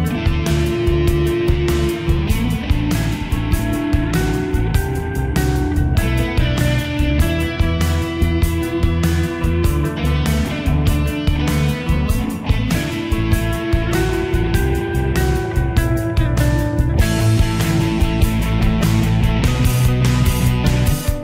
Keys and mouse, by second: 0.7 click, 15.1 click, 20.4 shift+middle click.